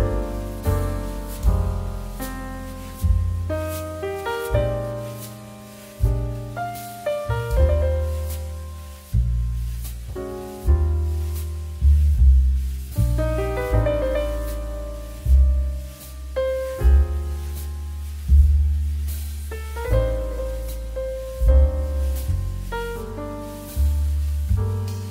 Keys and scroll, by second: 1.7 x, 8.4 z, 15.4 Escape.